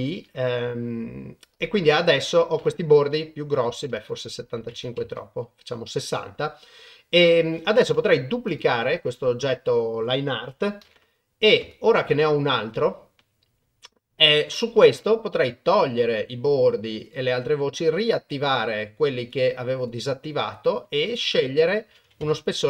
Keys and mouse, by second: 0.2 Tab, 1.5 click, 3.5 click, 4.5 click, 8.5 click, 10.8 shift+d, 15.7 click, 17.0 click, 17.9 click, 19.2 click, 19.8 click, 21.1-22.3 drag.